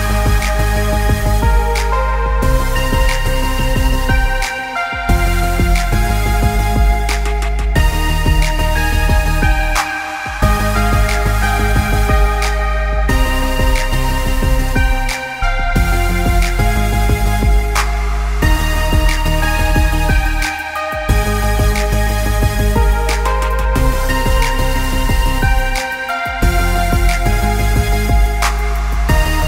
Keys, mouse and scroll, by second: 0.0-1.2 scroll down 5, 0.2 middle click, 0.8 middle click, 1.2 middle click, 2.2 g, 3.6 g, 4.8 middle click, 6.2 g, 7.3 middle click, 7.7 middle click, 8.6 g, 9.7 s, 10.6 middle click, 11.0 middle click, 11.6 `, 12.4-13.2 scroll down 7, 12.9 middle click, 13.3 middle click, 13.7 middle click, 14.2 g, 15.2 middle click, 16.1 g, 17.5-17.9 click, 17.7 click, 18.3 click, 18.4 click, 18.5-19.2 scroll down 5, 19.2 g, 20.8 s, 22.0 g, 23.0 middle click, 23.4 scroll up 6, 23.7 middle click, 24.0-24.5 scroll down 3, 24.2 middle click, 26.6 s, 28.0 g, 29.1 middle click.